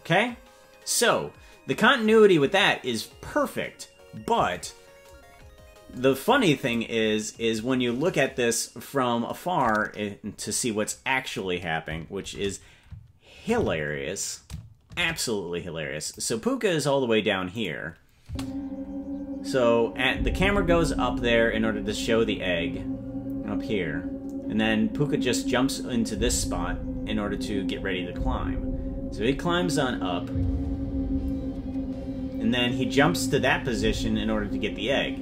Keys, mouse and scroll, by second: 1.3 scroll down 1, 6.6 click, 9.9-10.2 scroll up 1, 10.2-10.9 scroll down 2, 12.2 shift+`, 17.6 right click, 18.2 space.